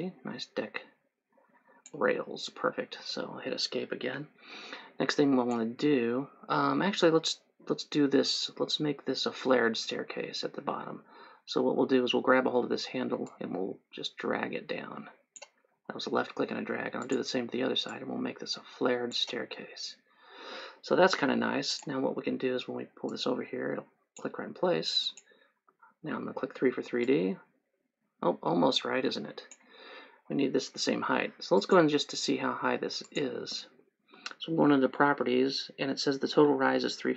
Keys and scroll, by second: 3.1 Escape, 26.9 3, 30.5 Escape.